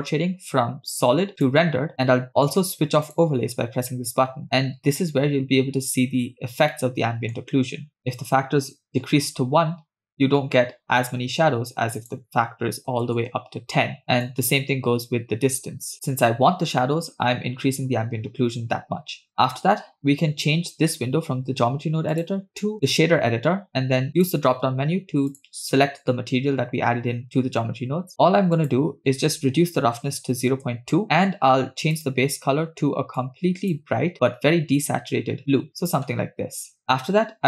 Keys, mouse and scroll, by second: 1.7 click, 3.2 click, 4.4-5.3 shift+middle drag, 4.4-4.7 scroll up 2, 6.4 scroll down 2, 6.8-7.8 shift+middle drag, 8.0 click, 12.0-15.9 drag, 16.9-17.8 scroll down 2, 19.3-19.7 scroll up 2, 19.7 scroll down 1, 22.1-22.9 drag, 24.1-25.7 drag, 28.1-28.6 scroll up 4, 28.6-30.6 drag, 31.0 middle click, 31.1 scroll up 1, 32.0 click.